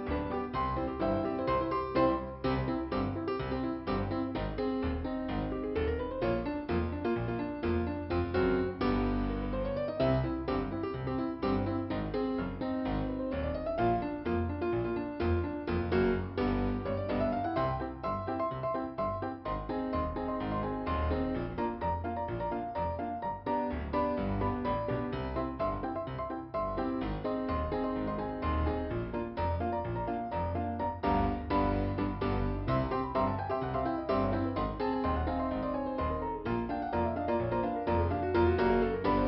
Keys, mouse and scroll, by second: 1.2 click, 2.9 click, 5.1 click, 7.8 p, 8.7 scroll down 1, 11.0 click, 11.3 click, 13.7 click, 14.5 click, 15.5 click, 17.2 click, 18.2-18.5 scroll up 1, 19.6 click, 21.0 click, 26.7 click, 31.1-31.5 scroll up 1, 34.4 click, 35.6 click, 35.8 click, 37.3 click, 38.3 click, 38.6 click.